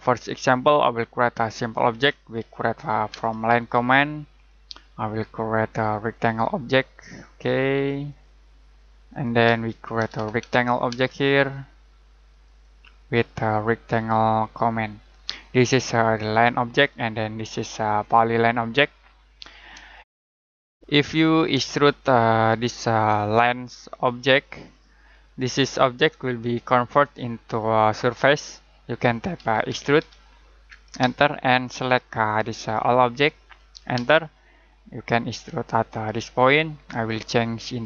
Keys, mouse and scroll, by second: 14.9 click, 19.3 Escape, 20.0 shift+middle click, 20.0 z, 20.3 middle click, 21.0 middle click, 21.7 middle click, 24.0 click, 26.0 Escape, 29.4-29.7 typing, 31.0 space, 31.7 click, 33.9 space, 36.4 click.